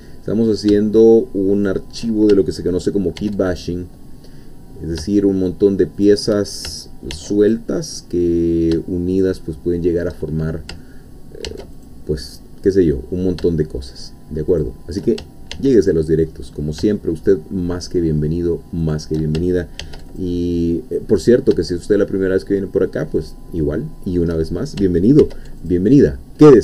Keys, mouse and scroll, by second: 1.5 shift+click, 3.2 ctrl+r, 3.6 ctrl+click, 6.0 shift+click, 7.1 ctrl+r, 7.5 ctrl+click, 9.1 shift+click, 9.4 shift+middle click, 11.5 ctrl+r, 11.8 ctrl+click, 14.5 shift+click, 15.5 ctrl+r, 15.9 ctrl+click, 18.8 shift+click, 19.8 ctrl+r, 20.2 ctrl+click, 23.2 shift+click, 23.7 shift+middle click, 25.2 ctrl+r, 25.6 ctrl+click.